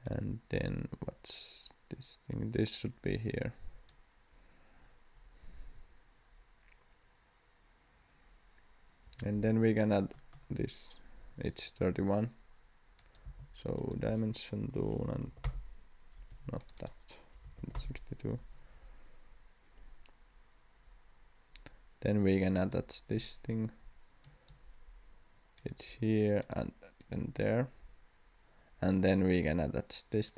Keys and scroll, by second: 9.0 Escape, 13.2 d, 14.8-15.7 typing, 16.3 Escape, 17.4 6.